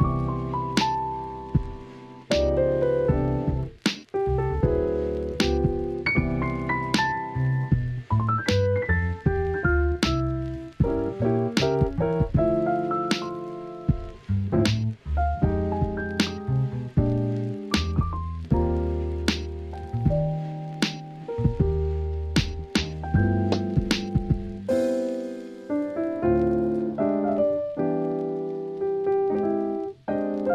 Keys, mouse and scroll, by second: 0.1 ctrl+a, 0.6 Tab, 1.2 click, 1.9 Tab, 2.4 shift+middle click, 3.0 click, 4.8 click, 5.5 s, 5.8 x, 6.8 click, 7.7 s, 7.9 x, 9.0 click, 9.6 click, 10.7 click, 11.2 click, 12.6 click, 13.4 s, 13.6 x, 14.4 click, 15.4 s, 16.0 click, 17.0 click, 18.3 click, 18.7 s, 19.8 click, 20.9 KP_3, 21.9 Tab, 22.4-23.6 drag, 23.7 shift+middle click, 24.3 click, 24.5 Tab, 26.5 click, 27.9 s, 28.2 y, 28.4 KP_0.